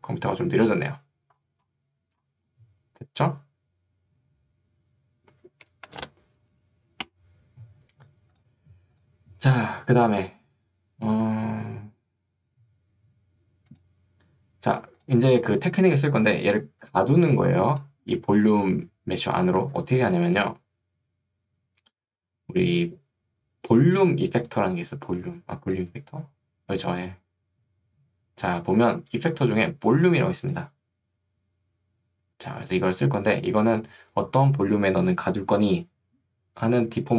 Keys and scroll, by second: 17.0 ctrl+2, 19.8 Escape.